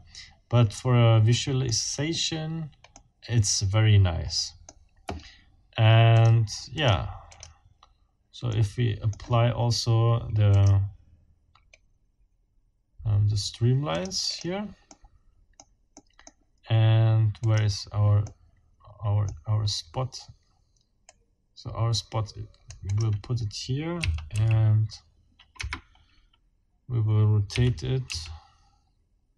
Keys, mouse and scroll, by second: 2.9-4.8 middle drag, 6.2 middle click, 6.8 click, 7.3 click, 8.5 click, 10.5 click, 13.9 click, 14.9 click, 16.0 click, 17.4 click, 18.2-19.2 drag, 19.3-20.1 scroll down 2, 21.1-22.8 right drag, 22.9 click, 24.0 f, 24.3 x, 25.6 Escape, 27.5 r, 28.1 x.